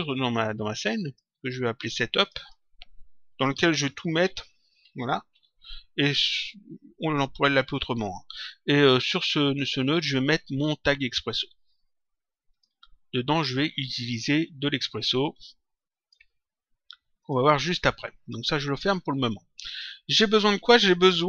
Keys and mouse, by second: 0.0 click, 2.2 click, 3.2-4.8 typing, 5.2 Return, 9.8 right click, 12.5 click, 15.1 click, 17.1 click, 18.7 click.